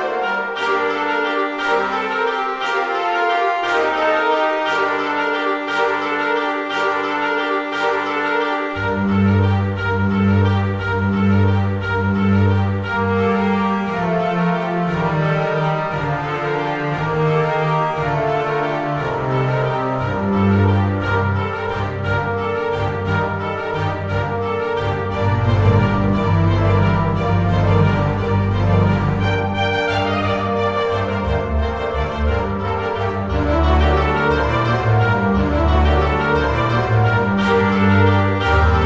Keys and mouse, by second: 0.0 click, 1.3 shift+d, 1.7 x, 2.0 click, 2.1 right click, 3.3 click, 3.9 g, 4.0 x, 5.5 click, 6.5 click, 6.8 e, 7.8 click, 9.8 click, 10.0-12.4 typing, 10.7 click, 12.2 click, 13.7 click, 13.9 shift+middle click, 14.6 z, 15.1 click, 16.7 click, 17.0 m, 17.2 click, 17.9 z, 18.1 click, 18.8 alt+z, 19.0 middle click, 20.0 middle click, 20.9 shift+click, 21.2 middle click, 21.5 g, 21.6 y, 22.5 click, 22.8 middle click, 23.2 alt+z, 23.4 click, 24.8 alt+z, 25.3 ctrl+a, 26.2 click, 26.6 KP_1, 27.2 shift+middle click, 27.9 shift+middle click, 29.1 z, 30.3 click, 31.3 shift+d, 33.1 click, 34.3 r, 34.6 KP_1, 34.7 KP_8, 35.0 Return, 35.0 KP_Enter, 35.6 g, 36.8 click, 37.1 shift+d, 37.4 x, 38.4 click, 38.6 z.